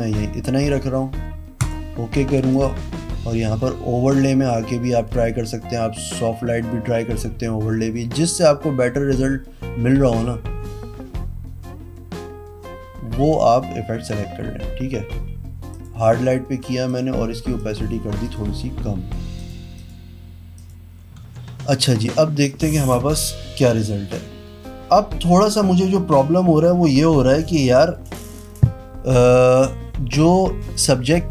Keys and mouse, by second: 2.5 click, 15.6 click, 16.8 click, 17.5 click, 18.2 click, 19.3 click, 20.5 click, 21.2 z.